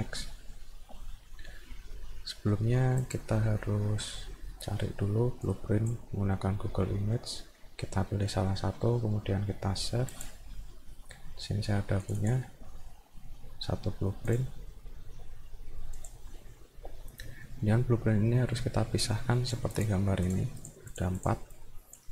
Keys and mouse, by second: 3.0 click, 5.5 click, 10.1 click, 12.0 click, 12.2 click, 14.3 click, 16.0 click, 19.1 click, 19.8 click, 20.3 click, 20.6 click, 20.9 click, 21.2 click, 21.5 click.